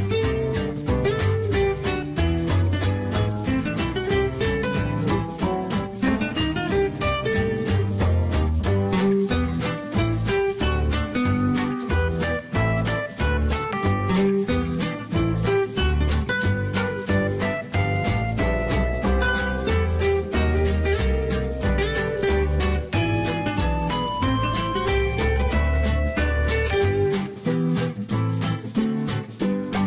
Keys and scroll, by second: 9.4-10.9 typing.